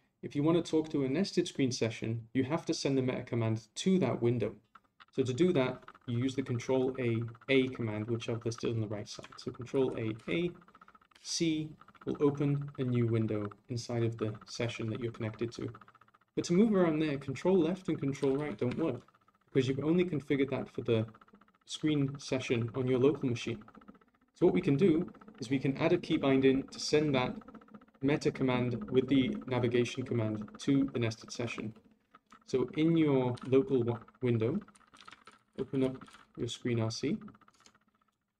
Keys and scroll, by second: 9.7 ctrl+a, 18.2 ctrl+Left, 18.5 ctrl+Right, 33.3 ctrl+Left.